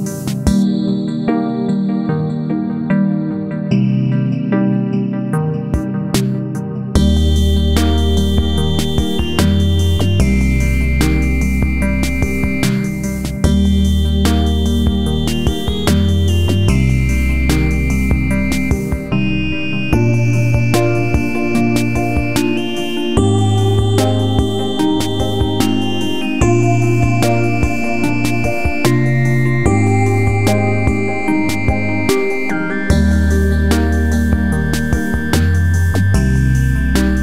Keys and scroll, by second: 2.4 Delete, 5.6 Delete, 14.2 Delete, 21.5 Right, 24.1 Left, 25.5 ctrl+v, 27.2 Right, 30.7 ctrl+c, 30.9 ctrl+v, 32.9 ctrl+c.